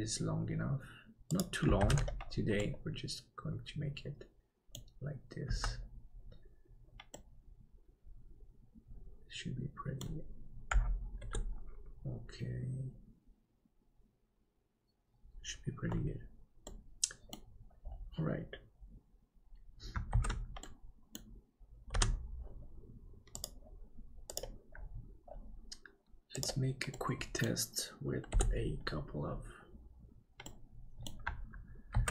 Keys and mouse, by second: 1.8 alt+z, 2.7-4.8 middle drag, 5.5 Tab, 7.1-10.2 middle drag, 11.2 ctrl+KP_7, 16.6 middle click, 20.5 ctrl+s, 20.6 middle click, 22.0 KP_Divide, 26.9 middle click, 28.3 KP_7, 30.4 middle click.